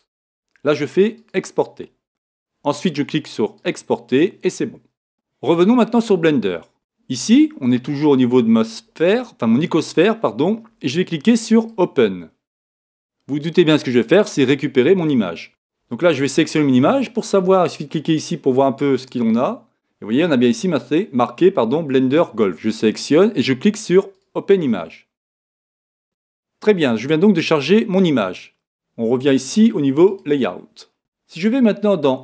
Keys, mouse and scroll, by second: 30.7 click.